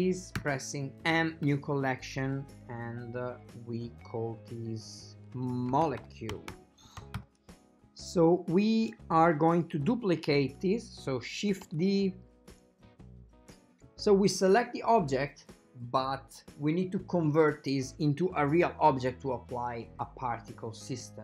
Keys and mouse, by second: 0.5 m, 9.3 right click, 11.9 d.